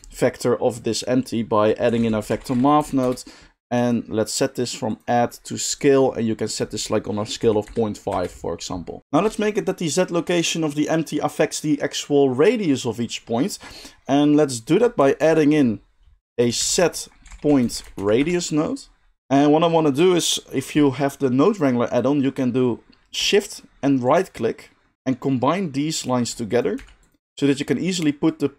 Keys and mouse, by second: 3.8-4.4 middle drag, 4.4-4.8 drag, 5.8-9.0 drag, 9.0-24.1 middle drag, 15.2 shift+a, 24.1-27.4 shift+drag, 26.4 middle click, 26.4 right click, 26.7 g, 27.2-28.4 middle drag, 27.2 right click, 28.4-28.5 drag.